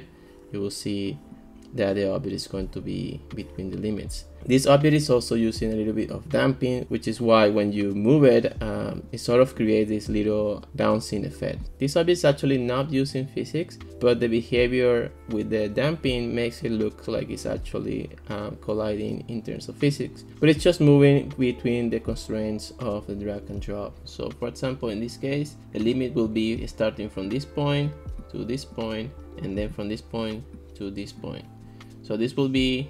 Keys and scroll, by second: 26.3 ctrl+s.